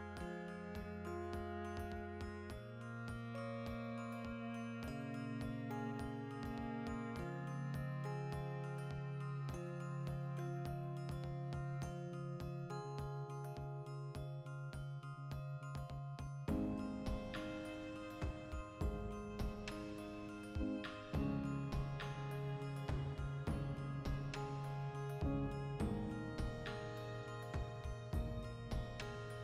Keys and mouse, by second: 0.2 ctrl+f, 1.5 F9, 5.3-6.6 shift+middle drag, 6.3 3, 6.6-8.3 alt+right drag, 8.3 x, 8.9-10.6 ctrl+shift+middle drag, 10.6 right click, 11.1 2, 11.2 right click, 11.9 f, 12.1 ctrl+middle click, 12.6 ctrl+r, 12.9 right click, 13.4 f, 13.8-15.0 ctrl+middle drag, 15.0-16.1 drag, 16.1-18.3 ctrl+middle drag, 17.2 Tab, 18.3-19.8 drag, 19.8-23.3 middle drag, 22.1 alt+q, 22.8 shift+d, 23.3 click, 23.4-26.3 shift+middle drag, 25.7 alt+q, 26.3-28.5 drag, 28.3 Tab, 28.5-29.4 middle drag, 29.1 a.